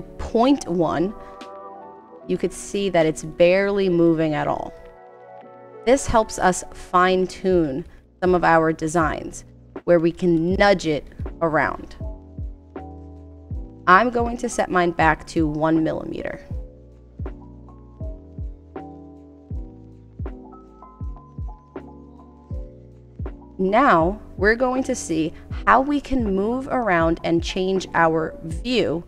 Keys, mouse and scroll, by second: 2.0 Left, 2.3 Left, 2.5 Left, 2.7 Left, 2.9 Left, 3.1 Left, 3.3 Left, 3.5 Right, 3.7 Right, 4.2 Right, 4.5 Right, 5.2 Right, 5.5 Right, 5.6 Right, 11.0 Right, 11.2 Right, 11.7 Right, 11.9 Down, 13.8 click, 15.8 click, 19.2-26.0 drag.